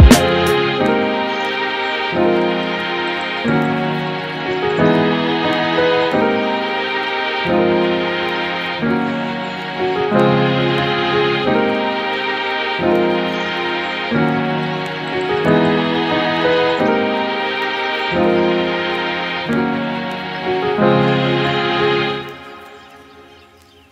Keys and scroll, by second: 11.5 super+s, 11.8 Right, 12.2 BackSpace, 12.3 3, 12.3 Return.